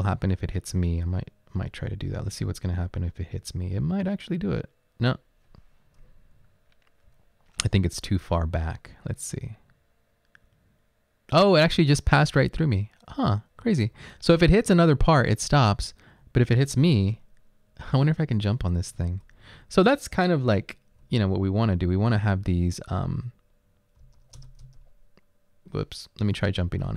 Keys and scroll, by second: 6.4 Right, 6.9 Right, 7.0 Right, 7.1 Right, 14.0 Left, 14.5 Left, 16.4 Right, 17.0 space, 18.8 Left, 21.2 Right, 21.2 Up, 24.1 Up, 24.2 space, 24.6 Up.